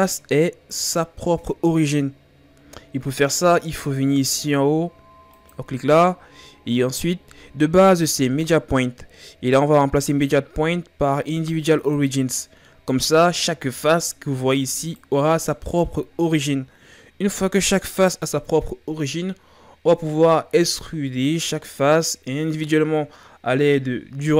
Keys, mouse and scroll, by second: 5.4-8.5 drag, 13.7 right click, 14.4 right click, 14.9 right click, 15.7 right click.